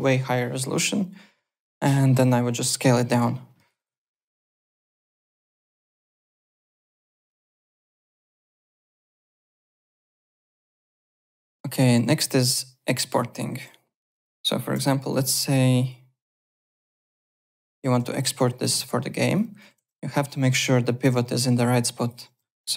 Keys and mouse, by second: 5.1 click, 6.5 click, 7.4 alt+Tab, 8.3 click, 12.1 click, 12.3 ~, 14.0 click, 14.7 ,, 15.1 click, 15.8 click, 16.9 ., 17.0 /, 18.1 click, 18.7 z, 19.0 alt+middle click, 19.2 alt+right click, 19.3 alt+click, 19.7 w, 20.1 alt+right click, 21.3 alt+click, 21.9 alt+click, 22.6 f.